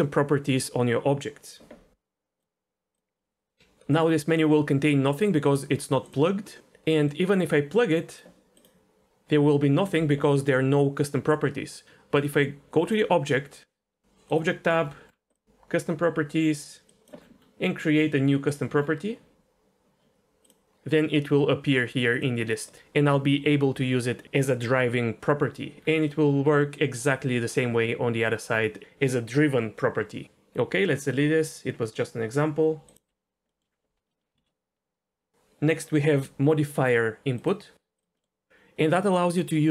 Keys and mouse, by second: 3.9-5.7 drag, 6.0 click, 7.1-8.2 drag, 8.6-11.7 drag, 12.1 click, 14.3 click, 15.3 click, 17.0 click, 20.5-22.2 drag, 26.2 middle click, 31.2 Delete, 33.5 middle click, 34.3 shift+a, 38.2 middle click.